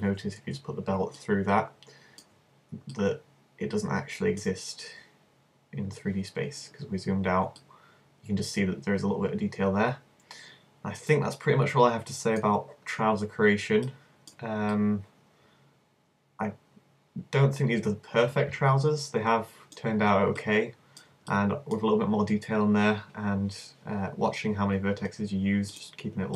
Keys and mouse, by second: 1.7 middle click, 3.1 middle click, 4.2-5.5 middle drag, 6.5 middle click, 7.7-14.8 middle drag, 16.6-20.5 middle drag, 24.3-25.5 middle drag.